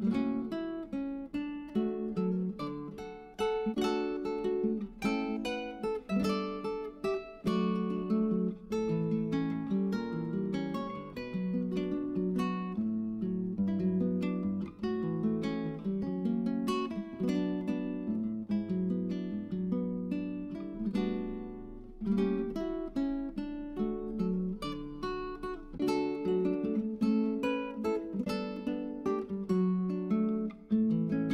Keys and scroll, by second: 2.9-5.1 typing, 15.6-16.9 typing, 22.8 1.